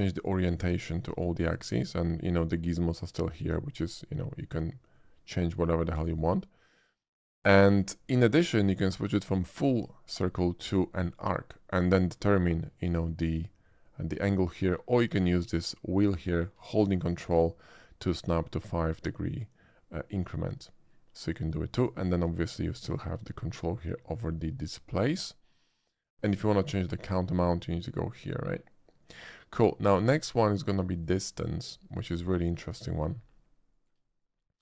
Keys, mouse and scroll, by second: 0.1 shift+click, 0.8 shift+click, 2.6-3.5 drag, 4.4-6.0 drag, 7.3 click, 11.1 click, 15.1-21.8 drag, 22.6-25.1 ctrl+drag, 27.4-30.0 drag, 31.0 click, 32.8 shift+middle click, 33.7 shift+middle click, 34.1 shift+middle click.